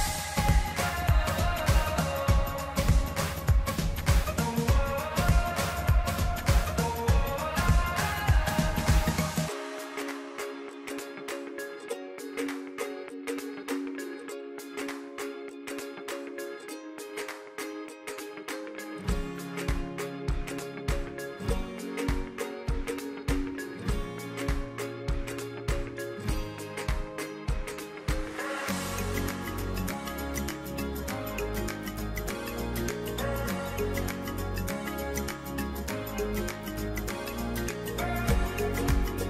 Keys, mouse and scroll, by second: 12.0 click, 14.3 click, 16.0 click, 19.5 click, 23.0 click, 27.3 click, 37.3 click.